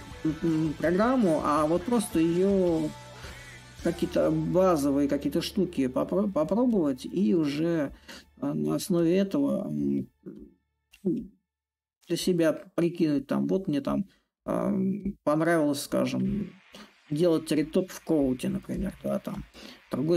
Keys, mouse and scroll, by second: 1.9-6.9 drag, 7.6-10.9 drag, 11.0-12.6 drag, 12.8-14.9 drag, 15.3-17.8 drag, 18.4-20.1 drag.